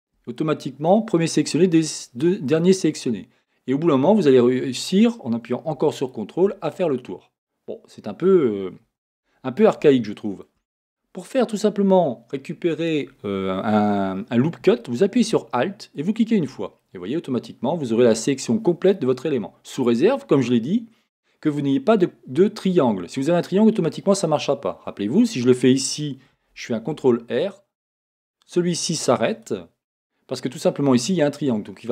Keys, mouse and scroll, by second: 0.4-6.0 middle drag, 6.0 ctrl+click, 6.7-16.0 middle drag, 9.1 a, 16.0 alt+click, 16.1-29.3 middle drag, 26.8 ctrl+r, 29.4-31.9 drag.